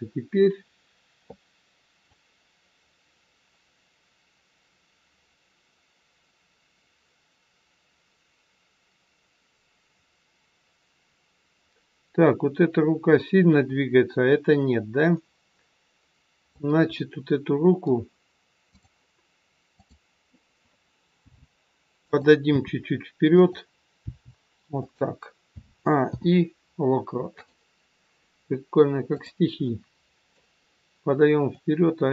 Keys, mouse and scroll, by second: 2.1 click, 16.9 middle click, 18.7 click, 19.7 click, 21.2 g, 22.4 r, 24.0 g, 25.5 a, 26.1 i, 29.1 click, 29.7 middle click, 31.6 click.